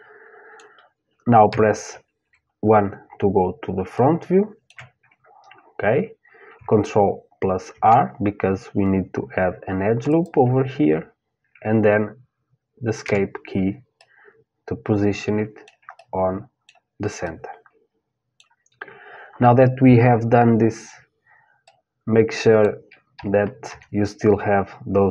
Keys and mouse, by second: 1.1 KP_3, 1.8 KP_1, 2.9-5.6 middle drag, 7.3 ctrl+r, 13.6-20.6 middle drag, 21.2-23.3 middle drag, 22.8 KP_3, 23.3 KP_1.